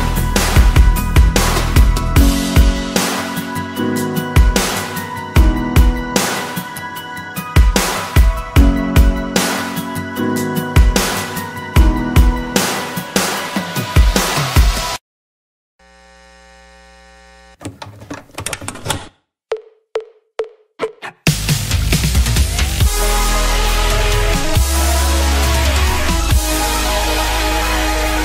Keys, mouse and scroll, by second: 3.3 scroll down 1, 9.3 7, 9.9 Return, 16.4 7, 17.0 Return, 20.1 middle click, 25.7-26.2 scroll down 4, 26.2 middle click.